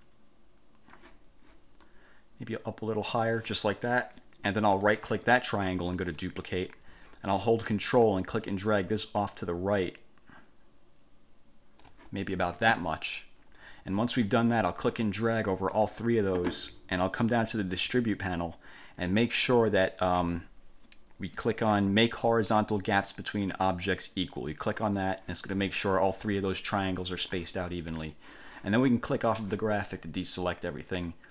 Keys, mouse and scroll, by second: 2.0 click, 4.9 right click, 6.1 click, 8.6-12.2 ctrl+drag, 14.8-16.1 drag, 25.0 click, 29.4 click.